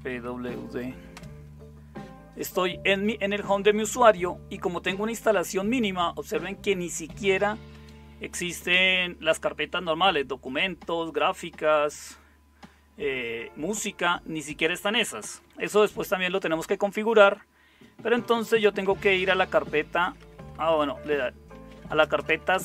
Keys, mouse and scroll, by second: 0.0-0.6 typing, 1.1 Return, 6.8-7.7 typing, 17.9-22.6 typing.